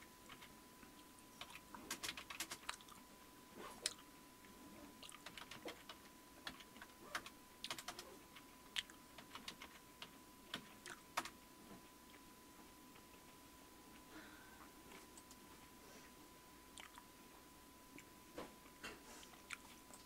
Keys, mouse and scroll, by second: 0.0-2.8 typing, 5.0-6.5 typing, 7.2 Return, 7.7 Return, 7.9 Return, 9.0-11.2 typing, 15.2 click, 19.9 click.